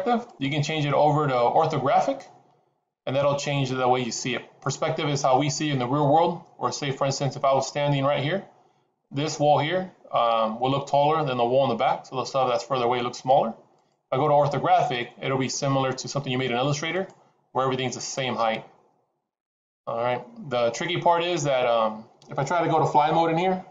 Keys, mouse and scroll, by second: 0.2 click, 13.7 click, 18.2 scroll down 4.